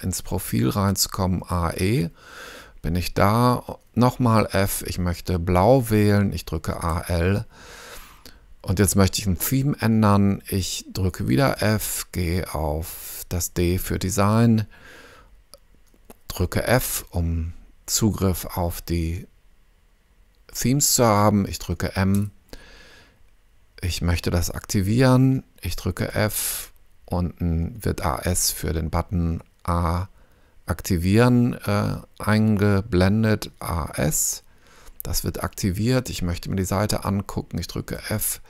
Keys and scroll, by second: 1.4 a, 1.7 e, 4.4 f, 6.6 a, 6.9 l, 11.6 f, 13.8 d, 16.7 f, 22.1 m, 26.1 f, 33.5 a, 33.9 s, 38.0 f.